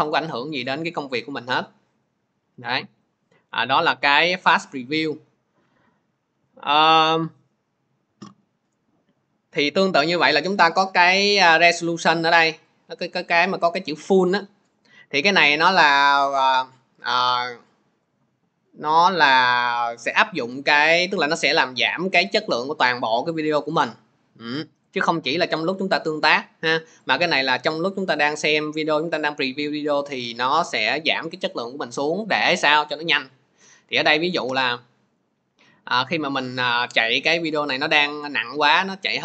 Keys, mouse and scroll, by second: 10.3 click, 24.8 click, 26.2 click, 27.0 click, 29.0 click, 32.2 click.